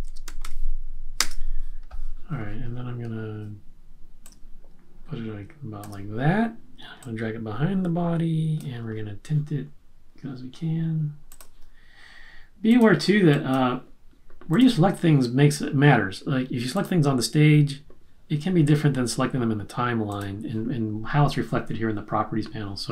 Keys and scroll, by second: 0.0-0.8 typing.